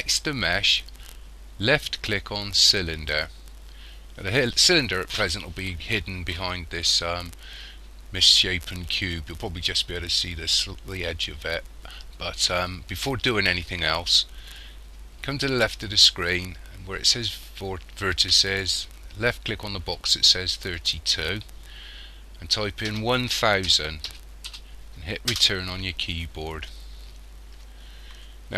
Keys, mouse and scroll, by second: 20.8 click.